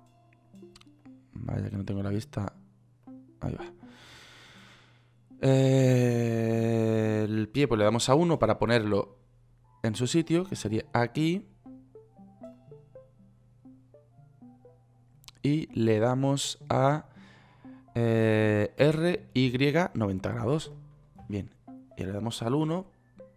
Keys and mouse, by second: 0.4 click, 1.4-3.4 middle drag, 3.4 click, 4.1 middle click, 4.1-5.4 drag, 8.3 KP_1, 19.2 r, 23.0 KP_1.